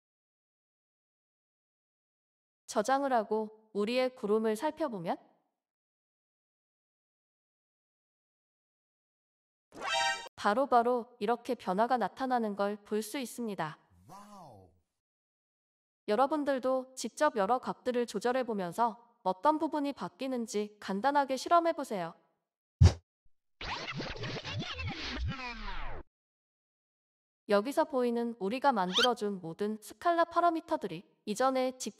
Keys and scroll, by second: 24.5-27.5 typing.